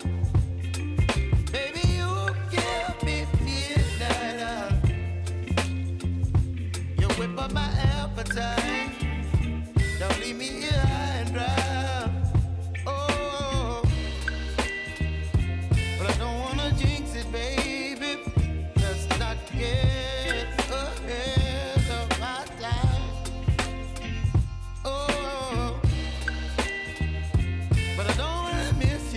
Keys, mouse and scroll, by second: 1.1 s, 2.2-5.8 drag, 6.0 space, 7.8 click, 8.2 space, 9.5-10.8 drag, 11.1-11.7 typing, 13.2 click, 14.8 ctrl+shift+c, 15.6 shift+a, 16.4 Return, 17.4 click, 18.8 ctrl+shift+c, 19.9 shift+d, 20.6 Return, 21.1 click, 22.4 ctrl+shift+c, 23.5 shift+i, 24.0 Return, 24.9 click, 26.6 ctrl+shift+c, 27.4 shift+d, 28.0 Return, 28.5 click.